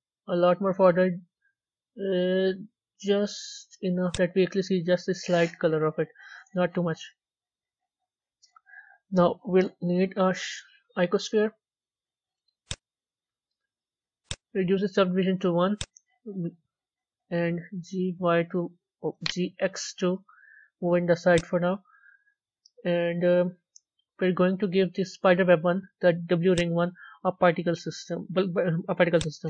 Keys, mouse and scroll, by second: 7.6-8.3 middle drag, 8.3 z, 12.6 shift+a, 13.0-13.3 scroll up 4, 15.6 scroll up 4, 16.1-16.7 scroll down 5, 17.0-17.8 middle drag, 17.8 g, 19.6 g, 21.8-22.6 scroll up 4, 22.6-23.2 scroll down 3, 23.2-26.5 middle drag, 26.5 click.